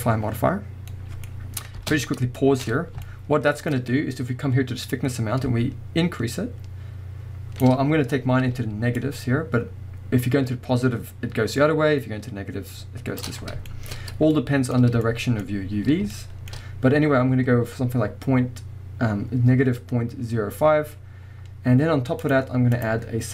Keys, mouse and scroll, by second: 0.9-4.9 middle drag, 1.3 scroll up 2, 1.8 space, 2.7-3.0 scroll up 2, 4.9-13.7 drag, 13.4 scroll down 1, 13.7-22.2 shift+middle drag, 13.9-14.3 scroll up 1, 15.4-16.1 scroll up 2, 22.2 click, 22.7-23.3 drag.